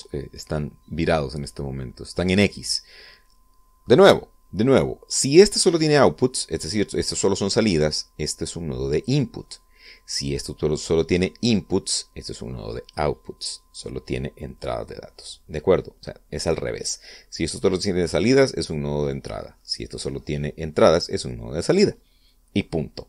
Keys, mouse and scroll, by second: 0.0 scroll down 2, 0.8-2.2 middle drag, 9.0-10.0 drag, 10.2-10.9 middle drag, 11.6 click, 13.1 click, 15.6-16.8 middle drag, 20.2 middle click.